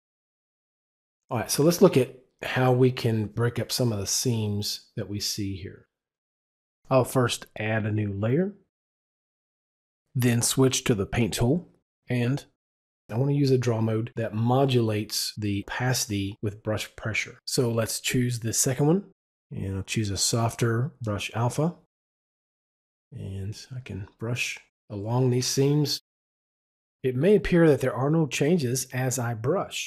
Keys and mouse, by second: 7.4 click, 8.4 double click, 8.4-10.2 typing, 10.9 Return, 10.9 click, 17.6 click, 20.7 click, 23.7 click, 25.0-26.4 drag, 26.9 double click, 28.6 double click, 28.8 click, 29.1 click, 29.2 double click.